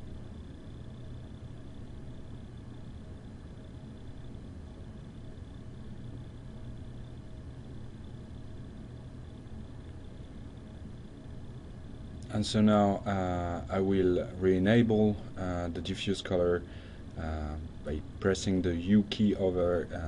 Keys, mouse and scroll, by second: 11.5 click, 12.6 click, 13.5 click, 15.6 u, 16.1 u, 17.3 drag, 18.6 click.